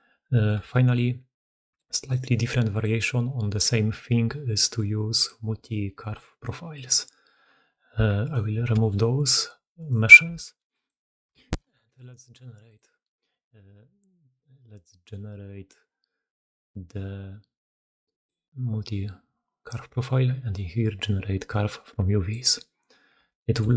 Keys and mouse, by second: 0.2 click, 0.6-1.8 shift+drag, 2.0 alt+click, 5.0-7.0 drag, 8.1 alt+click, 8.7 alt+shift+click, 9.6 alt+shift+click, 11.2 shift+middle drag, 11.2 shift+drag, 11.4 middle click, 11.8-12.6 alt+drag, 19.7-21.7 middle drag, 22.4 middle click.